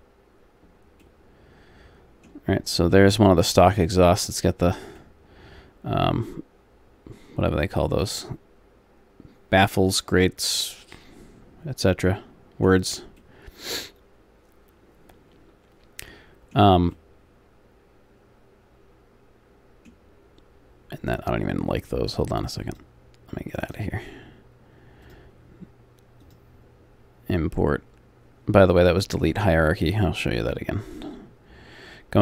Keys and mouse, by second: 3.1 middle click, 5.2 middle click, 7.2 middle click, 13.2 middle click, 17.1-18.5 middle drag, 18.8 middle click, 20.3 middle click, 22.2-27.9 drag, 23.7-25.1 right drag, 29.8-31.6 drag.